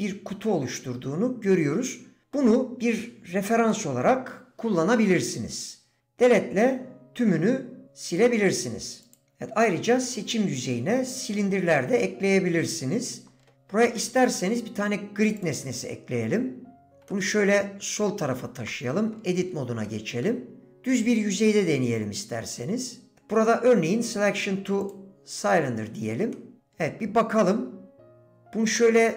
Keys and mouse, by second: 3.7 middle click, 6.1 Delete, 9.0 click, 13.2 Tab, 14.5 shift+a, 18.0 g, 18.7 shift+Tab, 18.7 click, 19.8 shift+click, 24.1 d, 26.3 middle click.